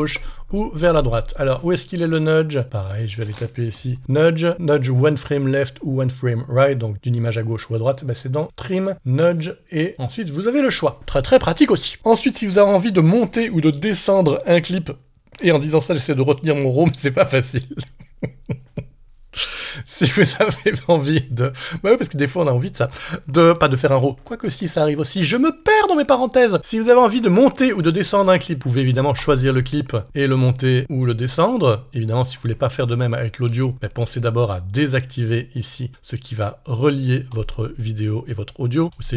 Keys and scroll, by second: 2.0 alt+super+Right, 33.5 super+z.